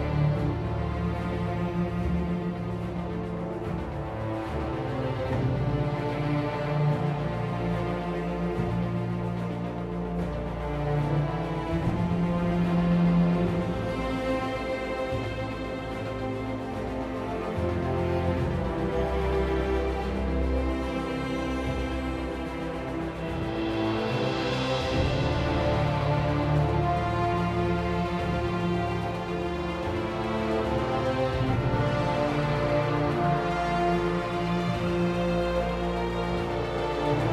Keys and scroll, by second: 9.2 r, 10.5 r, 15.0 r, 17.6 r.